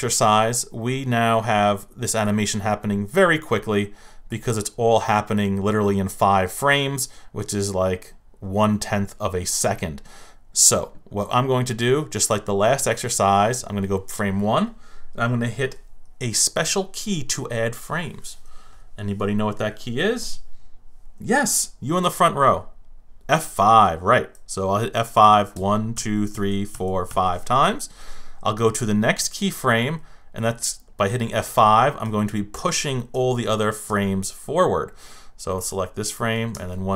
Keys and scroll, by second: 25.5 F5, 27.1 F5, 31.4 F5, 36.5 F5.